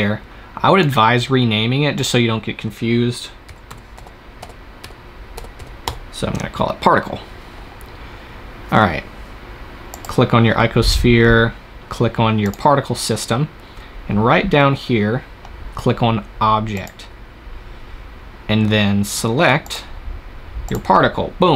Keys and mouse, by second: 0.7-2.6 drag, 9.8-14.2 drag, 14.2-16.6 middle drag, 16.6-18.5 drag, 19.5-21.4 drag.